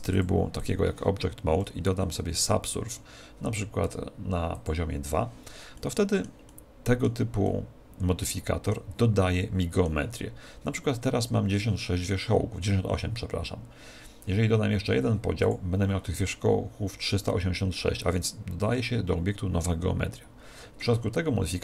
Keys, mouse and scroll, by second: 2.2 ctrl+1, 4.5 click, 5.7-9.1 middle drag, 9.2-15.3 middle drag, 15.3 click.